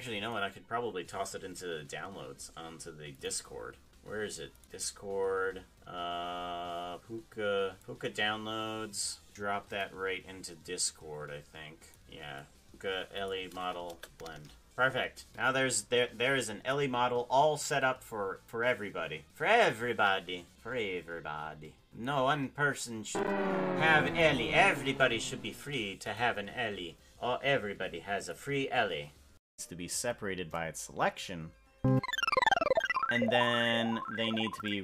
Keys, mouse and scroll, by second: 29.4 Tab, 29.4 p, 32.1 Tab.